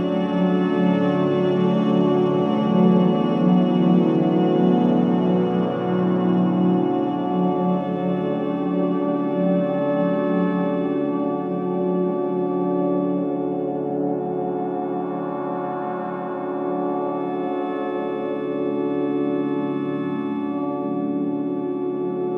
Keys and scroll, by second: 3.7 3, 9.7 ctrl+d, 9.9 Escape, 12.1 4, 16.3 2, 16.9 ], 18.0 4.